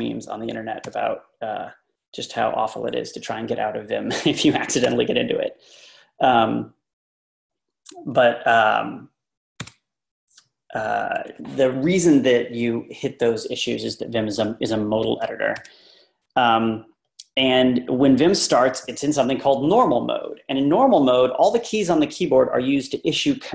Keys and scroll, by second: 0.9 Right, 4.9 Right, 9.7 Right, 15.6 Right.